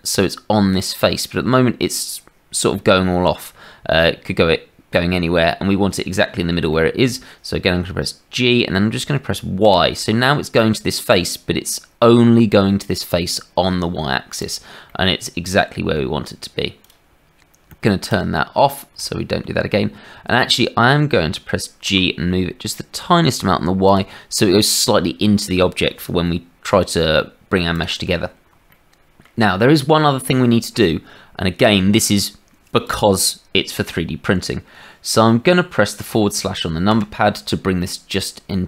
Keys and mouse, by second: 3.7 middle click, 4.0-5.1 drag, 5.7 middle click, 6.7 shift+click, 8.3 g, 14.8 click, 15.0 middle click, 15.3 click, 18.0 click, 19.1 shift+middle click, 20.4 shift+middle click, 21.8 g, 27.1 click, 27.5 middle click, 27.7 click, 27.8 middle click, 28.7 click, 29.2-32.7 middle drag, 32.7 click, 32.8-37.7 middle drag, 37.7 click.